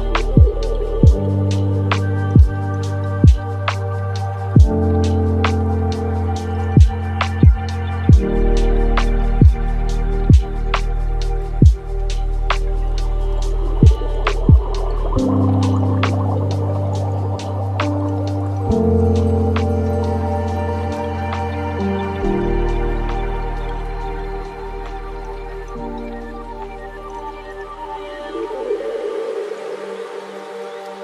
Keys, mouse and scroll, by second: 2.0 shift+a, 5.9-7.5 alt+right drag, 7.5 drag, 13.2-15.7 middle drag, 15.7-24.5 drag, 29.0 scroll down 6, 29.2-30.0 middle drag, 30.0-30.4 scroll up 4, 30.9-31.0 drag.